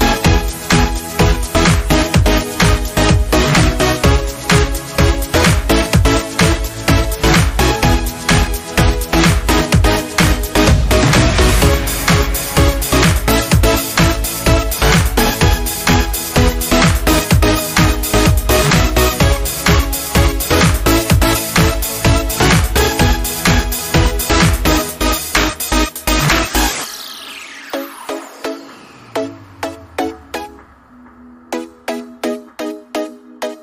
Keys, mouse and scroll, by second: 2.7-3.9 scroll up 1, 3.9 alt+scroll down 1, 8.7 scroll down 1, 12.1 scroll down 1, 12.4 alt+scroll up 1, 14.1 space, 14.3 click, 14.5 space, 16.9-21.8 drag, 21.9-23.2 drag, 23.2 ctrl+g, 25.4 click, 30.7-33.6 drag.